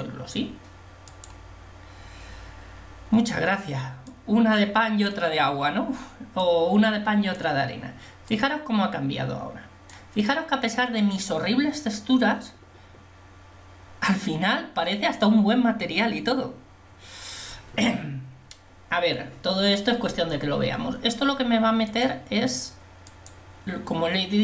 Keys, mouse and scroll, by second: 4.3-5.3 drag, 6.7 click, 9.6 click, 23.4 click.